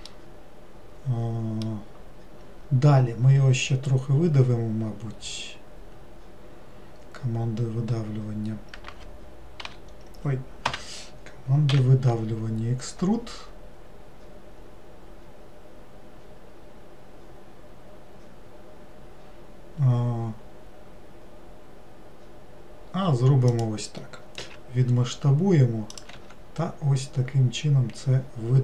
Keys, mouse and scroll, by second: 0.1 scroll up 1, 0.1-3.2 middle drag.